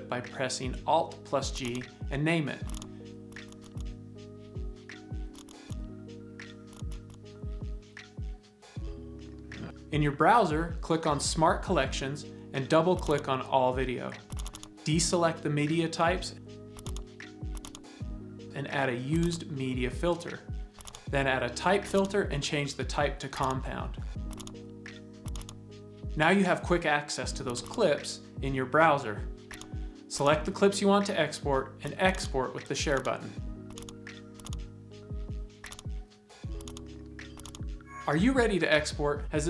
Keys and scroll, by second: 4.5 alt+g, 4.9 alt+2, 5.0 Return, 5.9 alt+g, 6.3 typing, 6.5 Return, 7.7 alt+g, 8.3 Up.